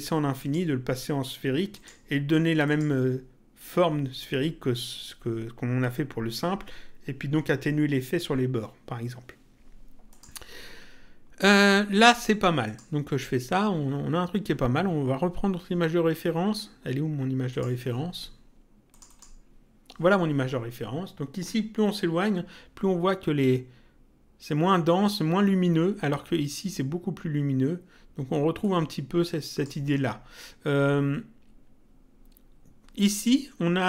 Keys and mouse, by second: 0.4 click, 1.7 click, 10.1 click, 12.7 click, 17.4 click, 18.9 click, 28.6 click.